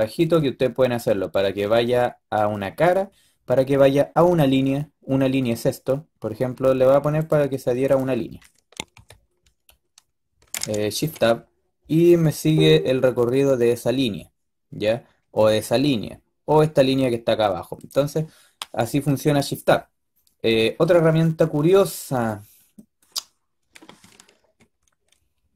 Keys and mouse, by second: 0.2-12.3 drag, 8.8 g, 20.6-21.0 middle drag, 21.4 middle click, 22.5-25.4 middle drag, 25.4-25.5 drag.